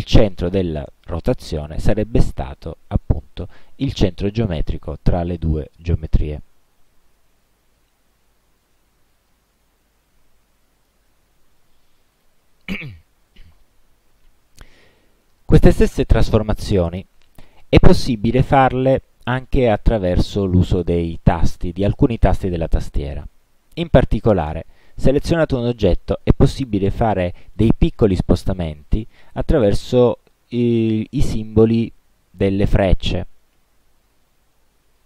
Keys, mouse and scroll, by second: 9.2-11.2 drag, 11.3 ctrl+z, 12.2 click, 24.6 click, 33.7 Right, 34.7 Left.